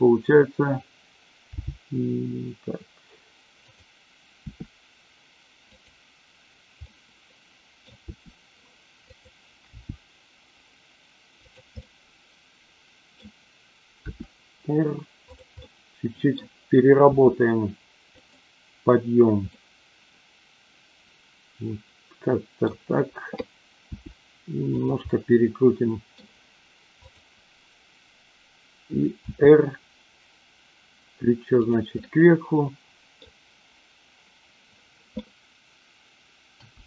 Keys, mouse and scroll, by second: 1.5 g, 3.6 click, 4.5 r, 5.6 click, 6.9-7.9 middle drag, 8.0 r, 9.0 click, 9.8 g, 11.3 click, 11.9-13.2 middle drag, 14.1 r, 15.2 click, 15.6-16.3 middle drag, 17.0 r, 18.1 click, 19.6-22.6 middle drag, 23.8 r, 25.0-26.1 middle drag, 29.2 r, 32.1-33.2 middle drag, 36.5 a.